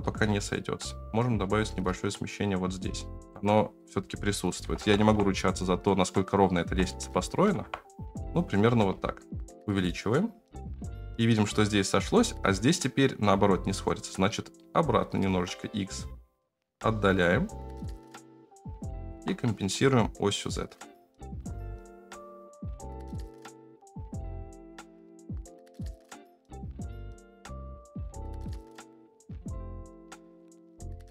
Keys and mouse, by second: 0.0-3.3 shift+middle drag, 3.4-5.1 middle drag, 6.1-8.6 middle drag, 6.9 BackSpace, 8.6 s, 10.1-19.1 drag, 19.7 middle click, 19.8-21.3 shift+drag, 21.8 alt+z, 23.0 alt+z, 23.3 shift+middle click, 23.7 shift+middle click, 25.0 shift+middle click, 25.7 shift+middle click, 26.5-26.8 ctrl+z, 27.0 ctrl+z, 27.1 shift+right click, 27.7 shift+right click, 27.9 ctrl+z, 28.0 ctrl+z, 28.3 shift+right click, 28.5 ctrl+z, 28.5 ctrl+z, 28.9 shift+right click, 29.5 middle click, 30.5 middle click.